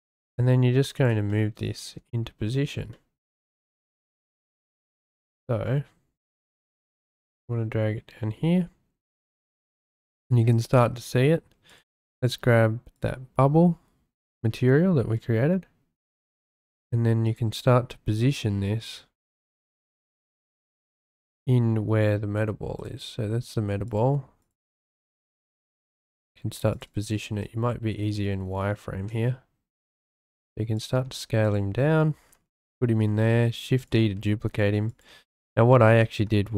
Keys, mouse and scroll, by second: 0.3 g, 0.9 click, 1.3-1.8 shift+middle drag, 2.9-3.4 shift+middle drag, 5.2-5.9 shift+drag, 6.9 g, 9.7 shift+click, 9.8 middle click, 11.7-13.0 drag, 16.1 g, 19.4 shift+drag, 20.4-20.7 shift+drag, 20.7 shift+middle click, 20.7 shift+scroll, 22.8 click, 23.9 click, 24.4 click, 24.9 click, 25.8 g, 26.7 shift+click, 27.1 z, 28.9 s, 30.0 shift+click, 30.4 s, 30.9 g, 31.4 click, 33.1 shift+d, 33.8 click, 34.1 s, 34.9 click, 35.3 ctrl+z, 35.9 ctrl+z.